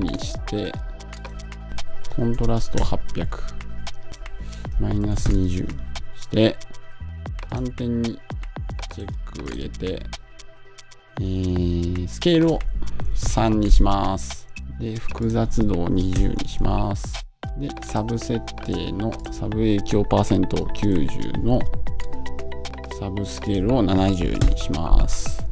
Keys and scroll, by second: 16.0 Home, 20.8 Return, 24.2 Home.